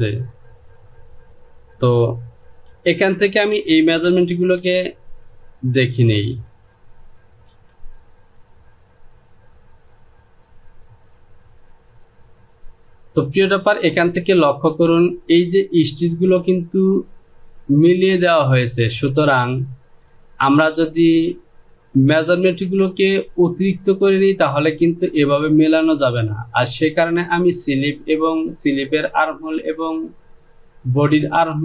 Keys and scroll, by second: 2.5 j, 4.3 Return, 7.5 Delete.